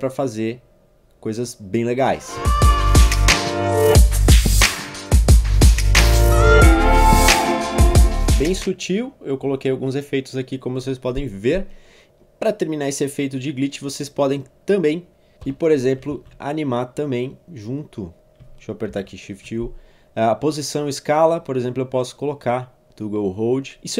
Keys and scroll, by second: 2.4 u, 4.2 1, 4.3 Return, 5.1 Page_Down, 5.3-7.0 typing, 5.5 Return, 5.7 Return, 6.0 Return, 15.4 p, 16.1 shift+s, 18.9 shift+u.